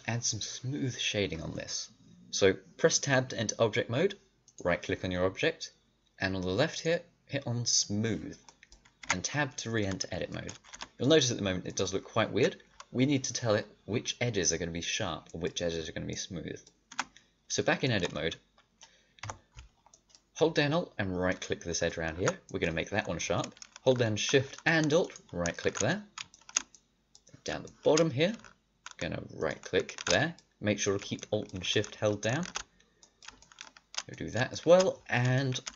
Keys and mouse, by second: 4.4-6.0 drag, 6.6-9.0 drag, 9.0 Tab, 10.6 Tab, 14.7 middle click, 16.9 Tab, 19.2 KP_5, 26.0 click, 26.9 middle click, 29.3 middle click, 32.8 middle click, 33.9 middle click, 34.6 middle click.